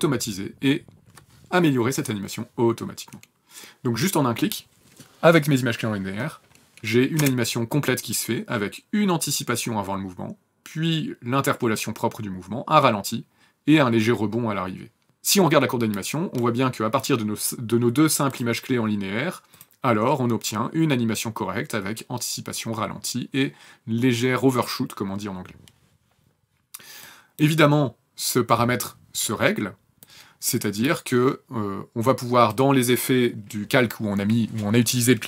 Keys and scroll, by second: 7.1 space.